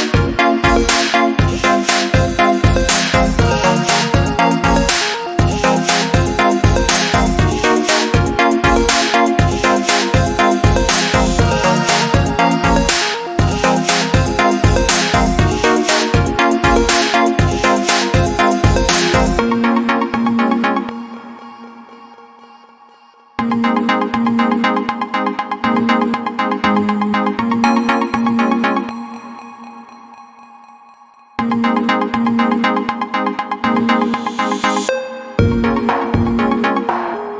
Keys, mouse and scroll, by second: 15.9 click, 16.3 ctrl+z, 16.8 click, 20.3 shift+click, 22.2 scroll down 1, 23.2 click, 29.5 scroll down 1, 31.3 click, 33.6 click, 35.2 click.